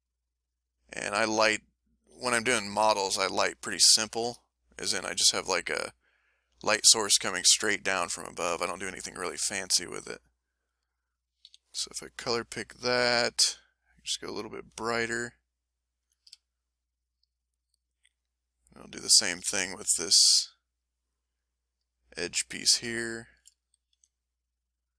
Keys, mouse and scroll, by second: 0.0 shift+click, 0.4 shift+click, 0.8 shift+click, 1.2 shift+click, 1.7 shift+click, 3.4-4.8 ctrl+middle drag, 8.4 ctrl+middle click, 9.4-10.5 ctrl+middle drag, 11.5 s, 13.3-14.7 drag, 15.2 click, 15.7 middle click, 16.0 a, 16.6 shift+click, 17.3 shift+click, 17.6 shift+click, 18.1 shift+click, 18.4 shift+click, 19.1 shift+click, 20.3 shift+click, 21.3 click, 21.7 middle click, 22.3 a, 23.0 shift+click, 23.6 shift+click, 23.9 shift+a, 24.1-24.9 shift+middle drag.